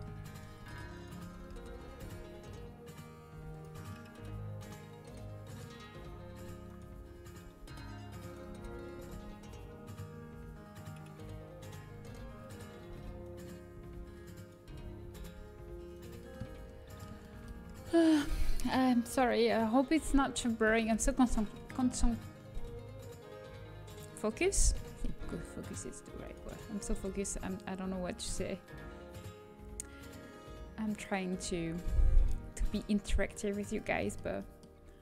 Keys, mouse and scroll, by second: 1.3 z, 1.8 g, 6.6 right click, 7.4 z, 8.4 z, 8.9 g, 12.2-14.9 typing, 13.7 right click, 14.6 middle click, 21.2 middle click, 24.8 middle click, 25.2 z, 26.4 z, 26.7 g, 31.5 z, 32.2 z, 33.6 g.